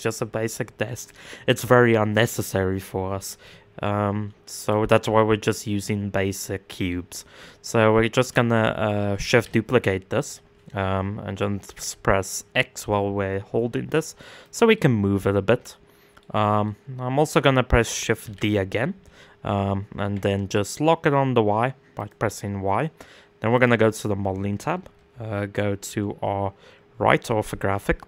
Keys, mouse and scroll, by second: 0.5 scroll down 1, 0.8-4.2 middle drag, 4.2 click, 4.7-5.4 middle drag, 5.4-6.0 scroll up 1, 6.0-8.9 middle drag, 8.9 shift+d, 14.3-15.8 middle drag, 15.8-16.2 scroll down 2, 16.2-17.0 middle drag, 17.0 scroll up 1, 17.8 shift+d, 23.1-24.5 drag, 24.5 KP_1, 25.2 KP_3, 27.7 r.